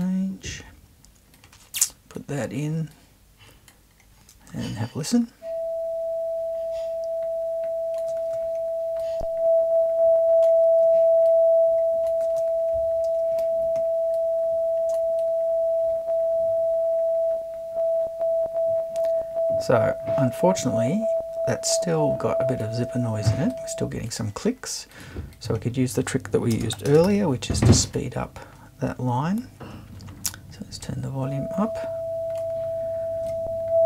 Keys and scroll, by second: 26.5 space, 26.8 0, 26.9 space, 27.1 1.